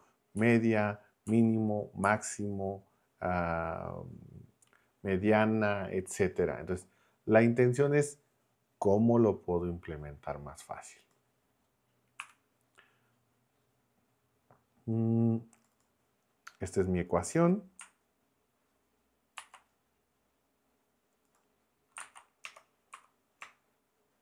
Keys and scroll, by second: 0.4 Down, 1.4 Down, 12.2 Escape, 19.4 super+c, 22.4 Return, 22.9 Up.